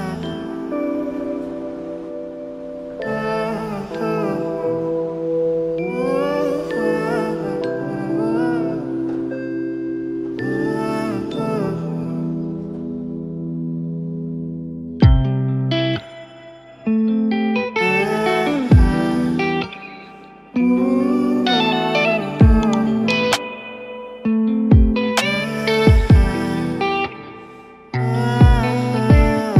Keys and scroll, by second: 10.5 ctrl+space, 22.3 ctrl+space, 23.2 ctrl+a, 25.3 ctrl+space, 25.9 ctrl+d.